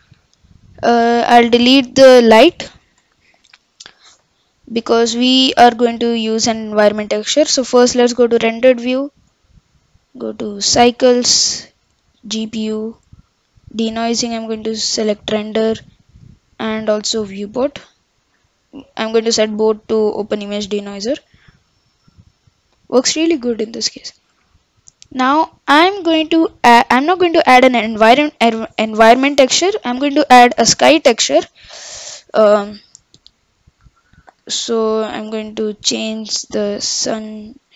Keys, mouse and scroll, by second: 2.3 Delete, 8.4 click, 9.3 click, 9.9-14.7 drag, 15.3-17.2 drag, 17.8-20.8 drag, 24.3 click, 25.8 click, 29.3-30.8 middle drag, 30.8 click, 33.5 click, 36.5-37.7 drag.